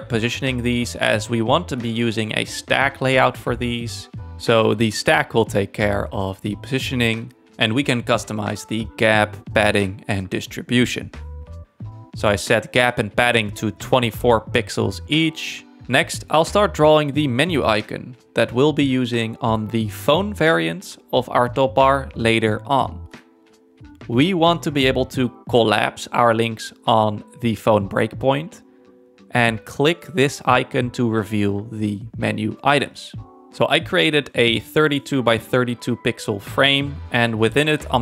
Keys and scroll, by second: 6.6 2, 6.8 Tab, 7.2 2, 7.4 Return, 14.6 f, 19.5 z, 27.1 f, 35.1 9, 36.2 Return.